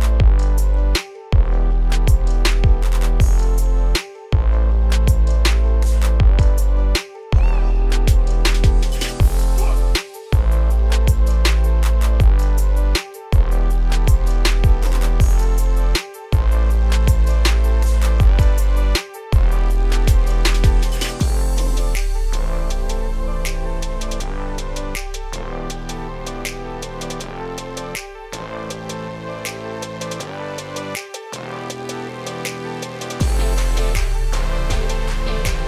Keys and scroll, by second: 12.5 ctrl+space, 15.7 ctrl+a.